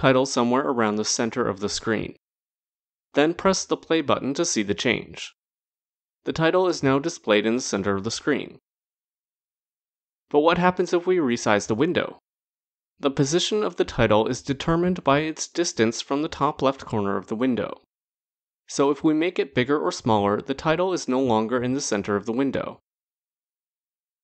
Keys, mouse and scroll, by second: 4.4 click, 15.8 click, 19.7 click, 23.3 click.